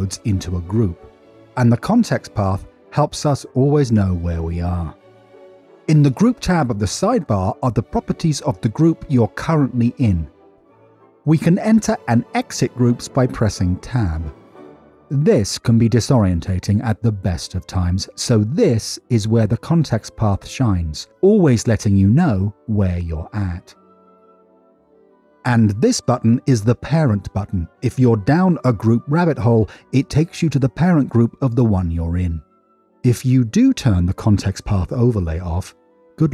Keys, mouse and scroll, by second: 0.8 ctrl+g, 12.1 n, 14.5 Tab, 20.2 click, 21.0 Tab, 29.6 click, 30.6 click, 33.9-36.3 drag.